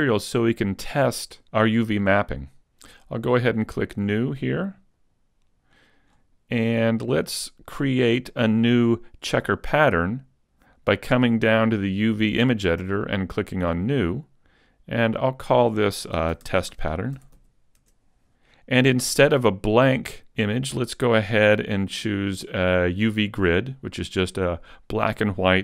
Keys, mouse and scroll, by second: 5.1 click, 17.8 t.